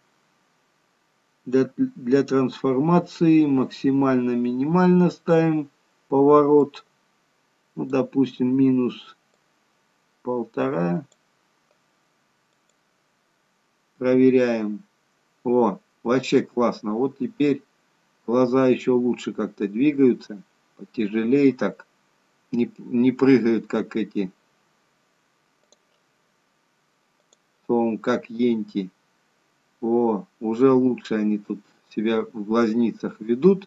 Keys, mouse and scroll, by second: 6.5 click, 9.3 click, 12.6 click, 13.9 g, 27.1 click, 28.3 g.